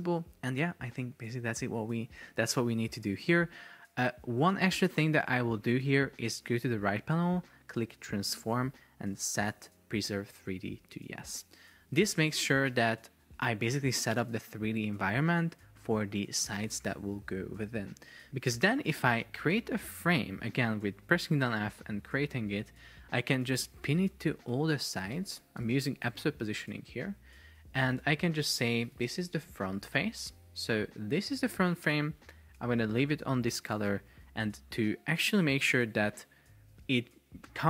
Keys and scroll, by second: 18.5 Escape, 26.1 Return, 28.1 super+r, 29.0 shift+f, 29.5 Return.